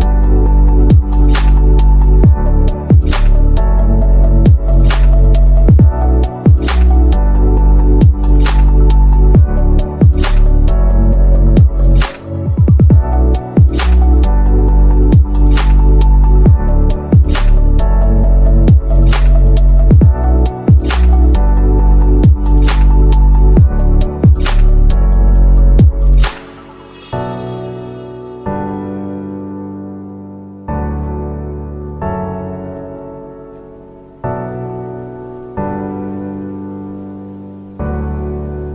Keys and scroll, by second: 4.8 shift+b, 34.6 shift+F2, 35.5 F9, 37.7 F9.